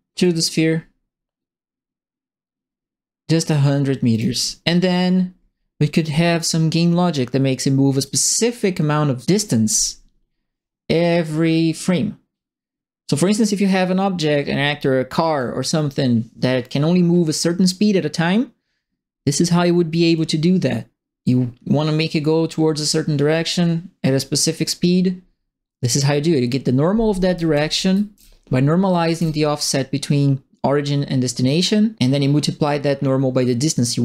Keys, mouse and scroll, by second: 0.2-4.1 drag, 6.3 click, 8.0-15.3 drag, 20.1-24.5 middle drag, 27.0-29.6 typing, 27.1-28.1 right drag, 28.9 right click.